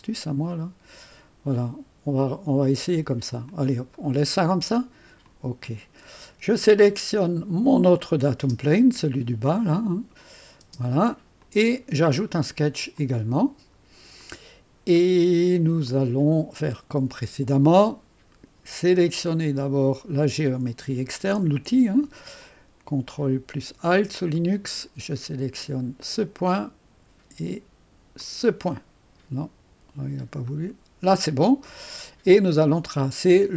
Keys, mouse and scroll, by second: 1.6 click, 2.7-4.1 drag, 5.3 click, 8.0 click, 8.5 space, 9.6 click, 10.7 typing, 11.4 click, 12.0 click, 13.0 click, 14.2-17.2 middle drag, 20.2 click, 22.5-24.5 drag, 26.0 click, 28.2 click, 30.5 click.